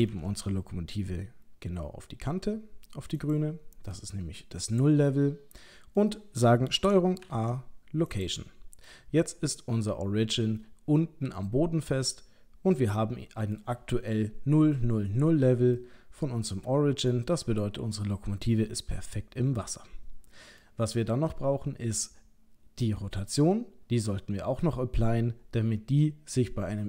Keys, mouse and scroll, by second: 0.0 g, 3.9 middle click, 7.2 ctrl+a, 8.9 middle click, 10.6 middle click, 15.8 middle click.